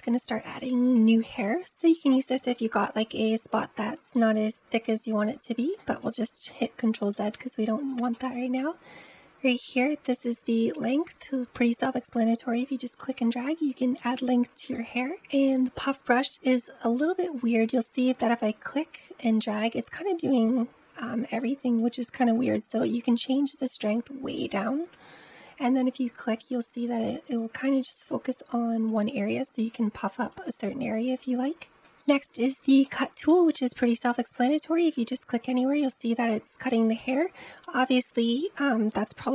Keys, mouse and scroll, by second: 2.4-4.2 middle drag, 4.2-6.5 scroll down 1, 6.5 ctrl+z, 7.2 ctrl+z, 8.0-10.1 middle drag, 10.1-14.7 drag, 14.7 ctrl+z, 15.0 click, 15.3-16.0 scroll up 3, 16.0-17.6 middle drag, 17.6 click, 22.2 ctrl+z, 23.8-31.5 drag, 32.0-32.7 drag, 32.7-33.9 middle drag, 33.9-38.4 drag, 39.0 ctrl+z.